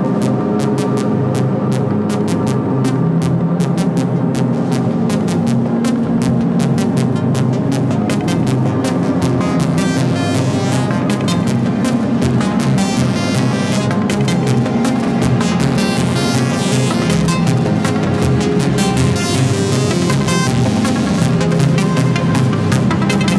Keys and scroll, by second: 0.1 Left, 1.5 ctrl+=, 6.1 Down, 6.8 Right, 8.5 ctrl+z, 11.7 Down, 12.3 Up, 14.5 ctrl+-.